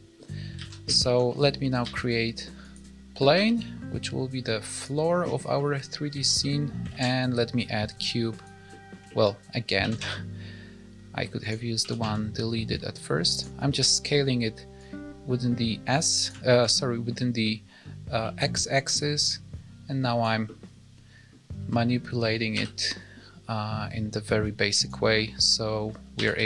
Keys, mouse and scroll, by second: 0.5 alt+a, 0.9 shift+middle click, 1.3 middle click, 1.8 shift+a, 3.0-3.3 scroll down 2, 3.3 s, 5.5 middle click, 6.0 alt+scroll down 1, 6.1 alt+a, 6.3 middle click, 6.8 shift+a, 8.6 middle click, 9.0 shift+middle click, 9.3 scroll up 1, 9.7 s, 11.7 s, 13.6 middle click, 14.7 click, 16.4 shift+middle click, 17.4 middle click, 18.1 middle click, 18.9 click, 20.4 middle click, 21.6 s, 25.1 middle click, 26.1 s.